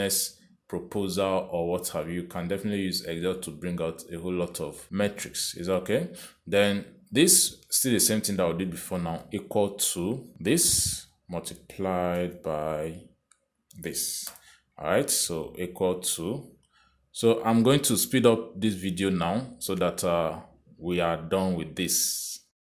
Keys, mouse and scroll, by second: 4.9 click, 7.0 click, 8.2 click, 10.3 =, 12.1 click, 13.4 shift+8, 14.9 click, 15.6 Return, 17.1 click.